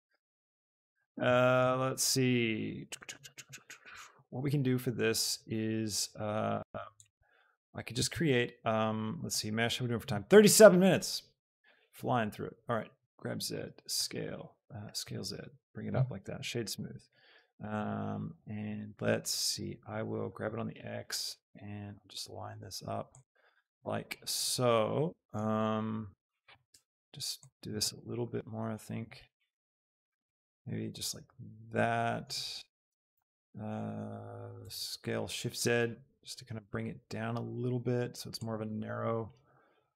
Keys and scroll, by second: 13.0 z, 14.1 s, 15.2 z, 20.3 x, 26.9 z, 34.6 shift+z.